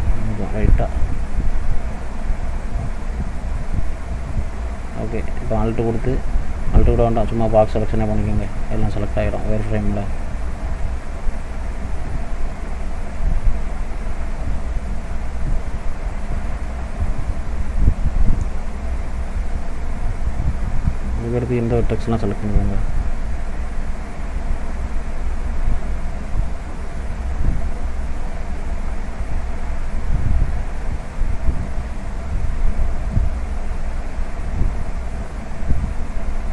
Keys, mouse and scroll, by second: 2.0 click, 3.3 click, 6.7 click, 8.2 click, 11.8 shift+click, 17.1 shift+click, 19.1 shift+middle click, 19.6-21.9 shift+scroll up 5, 21.9 shift+click, 32.9 shift+click, 36.0 shift+click.